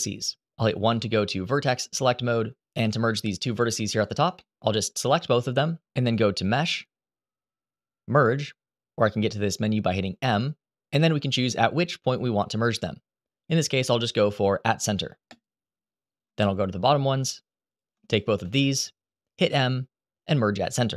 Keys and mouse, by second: 0.6 1, 4.1 shift+middle click, 6.4-15.1 drag, 16.2 shift+middle click, 17.4 click, 19.2 m.